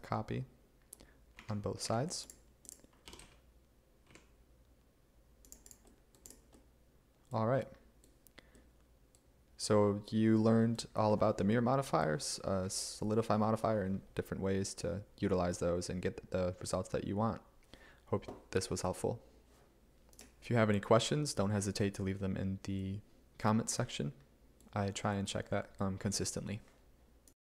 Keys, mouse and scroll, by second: 1.5 a, 3.1 g, 3.3 z, 4.2 x.